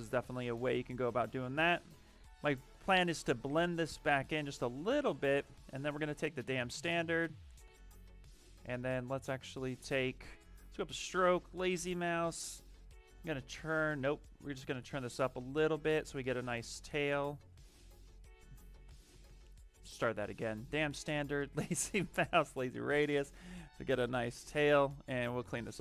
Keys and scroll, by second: 5.1-6.2 typing, 17.7 ctrl+z, 18.7 b, 19.2 s, 24.9 ctrl+z.